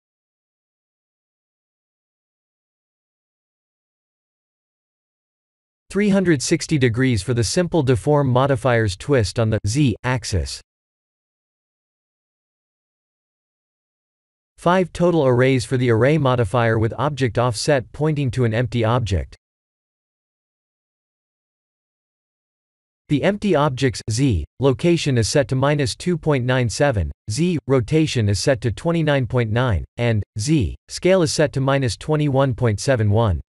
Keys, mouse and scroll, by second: 4.3 click, 5.0 click, 10.2 click, 11.1 click, 19.9 click, 23.3 click, 24.7 click, 25.7-27.9 scroll down 24, 28.6-30.0 scroll up 16.